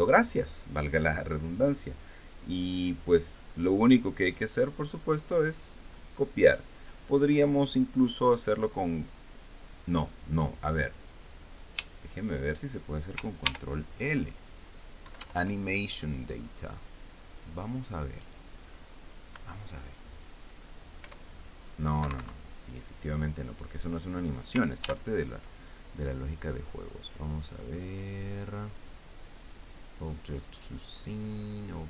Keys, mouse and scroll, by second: 0.2 right click, 3.8 right click, 5.1-6.2 right drag, 12.7 shift+right click, 14.1 ctrl+shift+l, 15.7 Down, 20.0 Return, 21.7 p, 22.7 Escape, 25.5 ctrl+l.